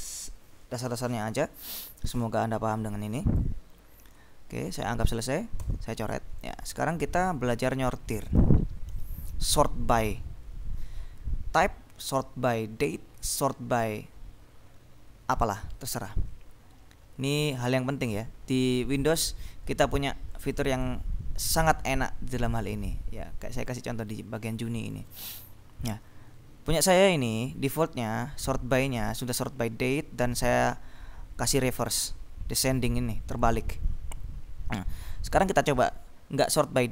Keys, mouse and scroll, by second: 2.2-4.0 drag, 4.8 b, 5.7 s, 6.6 click, 8.9 ctrl+b, 18.7 click, 20.6 click, 22.4 click, 23.7-24.3 scroll down 2, 24.9-25.5 scroll down 2, 28.1 click, 33.4 click, 33.8-34.3 scroll down 2, 34.7-35.6 scroll up 1.